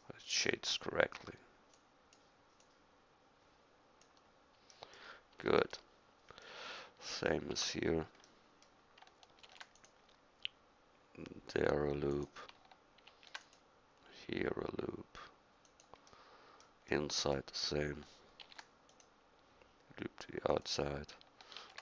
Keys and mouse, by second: 1.9 click, 4.8-5.1 middle drag, 7.6 Tab, 9.5 ctrl+r, 13.1 ctrl+r, 18.4 ctrl+r, 21.6 ctrl+r.